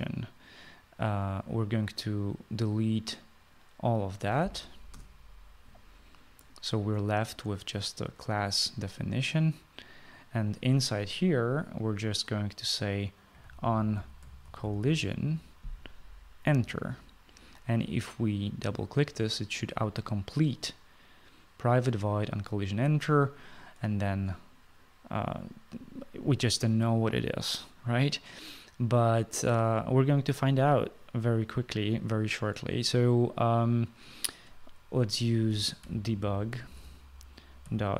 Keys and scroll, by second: 5.7 BackSpace, 13.8-16.0 typing, 36.2-37.9 typing.